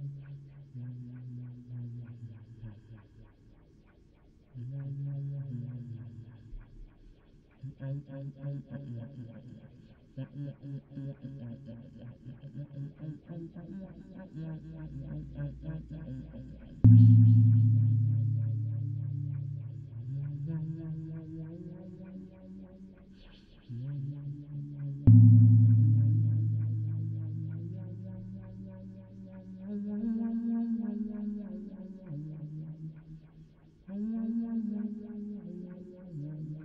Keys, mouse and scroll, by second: 0.6 click, 1.5 click, 2.5 middle click, 2.7 click, 3.1 shift+a, 8.7 click, 9.4 click, 9.6 middle click, 9.7 middle click, 10.8 middle click, 11.1 click, 12.5 middle click, 12.7 click, 14.5-22.4 typing, 14.6-16.7 drag, 22.2 click, 22.6 click, 23.4 d, 23.7 n, 24.1 click, 24.7 n, 33.5-36.6 d, 36.5 click.